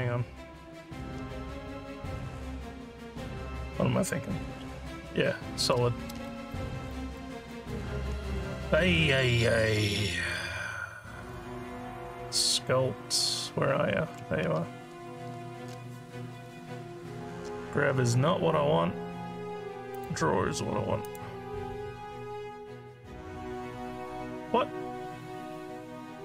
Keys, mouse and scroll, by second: 6.9 alt+click, 7.5 alt+click, 10.0 click, 11.6 Tab, 19.9 click, 21.0 click.